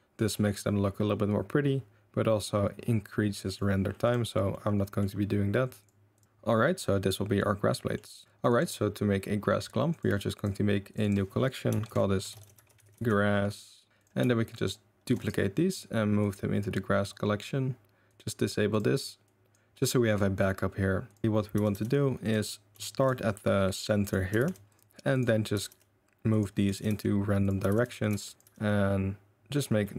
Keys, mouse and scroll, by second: 0.3-3.5 middle drag, 3.5 drag, 3.8 middle drag, 4.0 click, 4.1-4.5 middle drag, 5.0-7.3 middle drag, 7.7 middle drag, 8.4 click, 9.9-10.4 drag, 10.9 click, 11.0-13.9 drag, 12.9 s, 14.5 shift+click, 15.0 shift+d, 16.2 click, 18.0 click, 19.2 click, 20.0 click, 21.0 click, 21.5 r, 22.4 middle drag, 22.8 shift+middle drag, 24.0 middle click, 24.3 r, 25.2 middle drag, 25.5 r, 26.5 middle click, 26.7 r, 27.6 r, 28.1 r, 28.4 r, 29.8-29.9 middle drag.